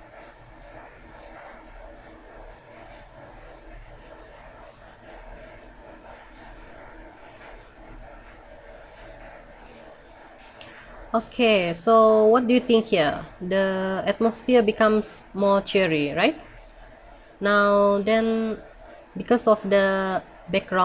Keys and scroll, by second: 1.1 ctrl+z.